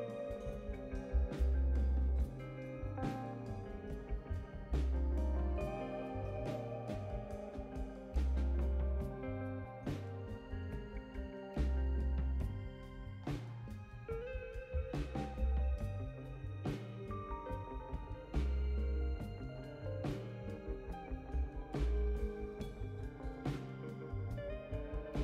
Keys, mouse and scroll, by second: 2.9 right click, 6.6 click, 9.6 click, 14.9 click, 18.3 5, 19.5 click.